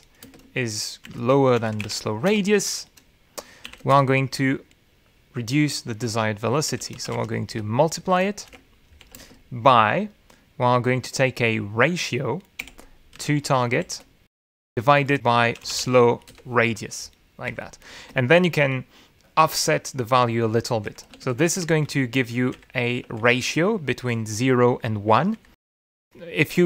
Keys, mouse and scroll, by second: 0.0-3.3 typing, 0.8 shift+Return, 3.3 shift+Return, 4.7 shift+;, 4.9 shift+Return, 7.3-10.2 typing, 13.6-17.3 typing, 17.3 Return, 18.4 End, 18.9 space, 22.1 Left, 23.1 ctrl+shift+Right, 23.7 ctrl+shift+Left.